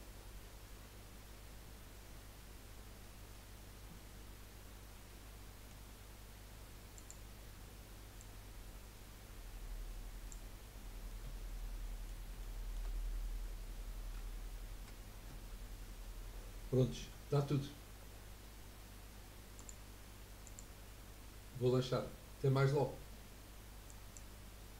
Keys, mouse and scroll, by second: 5.1-7.0 middle drag, 7.0-10.1 drag, 11.1-14.7 middle drag, 19.6-22.6 drag.